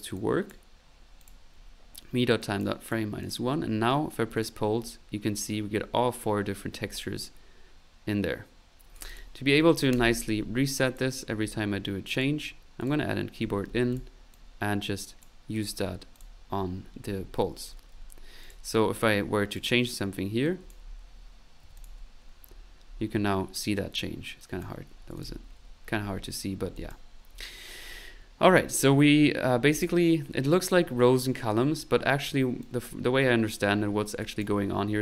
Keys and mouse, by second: 0.0-35.0 typing, 0.1 click, 1.2 click, 2.4 click, 3.2 click, 4.3 click, 5.6 middle click, 8.9 click, 10.8 click, 12.1 click, 12.8 click, 13.9 click, 14.3-15.5 drag, 16.1 click, 18.4 click, 19.5 click, 20.4 click, 22.2-24.0 middle drag, 24.4 click, 26.7 click, 29.7 click, 32.6 click, 34.2 click.